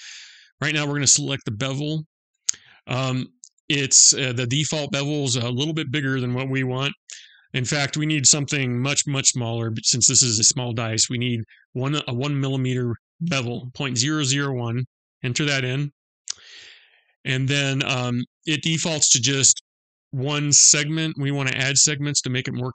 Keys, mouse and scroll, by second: 6.6 click.